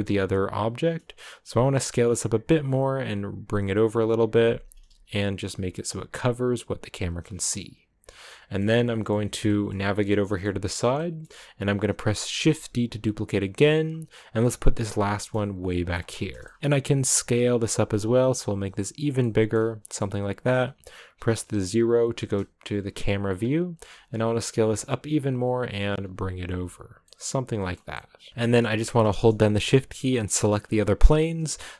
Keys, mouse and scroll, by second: 0.0-1.7 scroll down 1, 1.8 s, 2.6 g, 4.5 g, 4.8 s, 5.5 g, 7.1 scroll down 2, 7.4-8.8 middle drag, 8.8 scroll down 3, 9.0-12.3 middle drag, 12.3 shift+d, 15.0 middle click, 15.5 g, 15.9-17.0 middle drag, 17.0 s, 18.6 g, 19.1-22.1 middle drag, 22.1 KP_0, 23.3-23.9 scroll up 1, 23.9 s, 24.6 g, 25.7 s, 26.5 g, 27.0-28.3 middle drag, 28.3-29.2 scroll down 1, 29.2-30.1 scroll down 1, 30.1-31.7 shift+right drag.